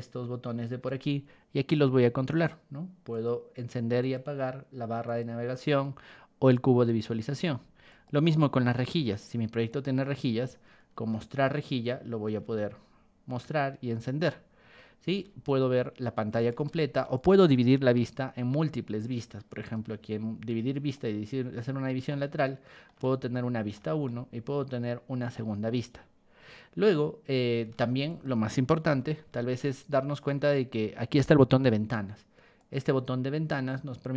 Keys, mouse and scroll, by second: 0.8 Escape, 2.3 click, 3.1 click, 4.0 click, 5.0 click, 7.4 ctrl+1, 7.9 click, 8.6 Escape, 9.7 click, 10.5-11.0 scroll down 4, 11.8 shift+middle click, 12.0 shift+middle click, 12.5-14.2 shift+middle drag, 15.1 ctrl+1, 15.4 click, 16.5 ctrl+shift+click, 17.1 ctrl+shift+click, 17.7 Escape, 19.6 click, 20.9 click, 21.7 scroll down 2, 22.1 shift+middle click, 23.0 shift+middle click, 24.0-25.3 shift+middle drag, 27.7 ctrl+1, 28.1 click, 28.1 right click, 28.8 r, 29.6 ctrl+click, 29.6 ctrl+right click, 31.6 Escape, 32.6 click.